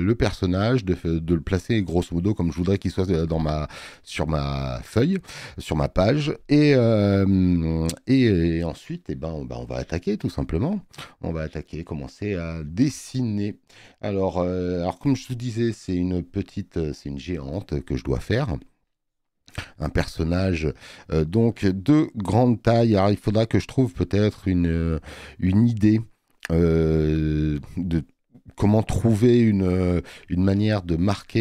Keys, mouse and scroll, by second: 21.0 click, 24.4 click, 29.2 space, 29.4 click.